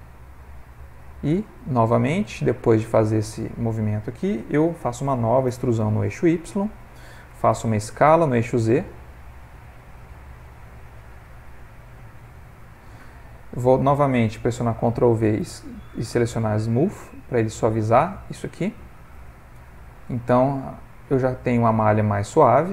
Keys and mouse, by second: 1.4 alt+click, 1.8 middle click, 3.3 middle click, 5.7 e, 7.8 s, 12.7 middle click, 14.8 ctrl+v, 18.1 middle click, 20.0 s, 22.4 middle click.